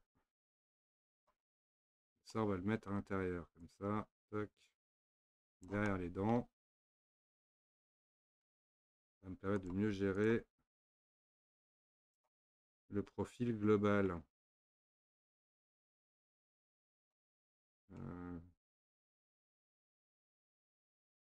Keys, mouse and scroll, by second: 0.8 click, 1.5 middle click, 2.0-2.3 scroll down 2, 2.3-3.6 middle drag, 3.6 click, 5.9-7.4 middle drag, 7.4 alt+z, 7.8 middle click, 8.7-9.6 scroll up 1, 9.6 click, 10.2 shift+click, 10.8 click, 12.8-15.2 middle drag, 15.2 click, 16.3 click, 18.0-19.4 middle drag, 19.4 click, 20.8 click.